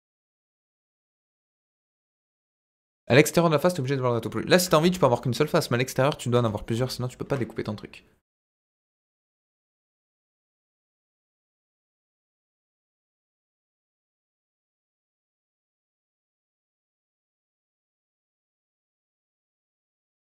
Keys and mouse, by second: 4.8 ctrl+z.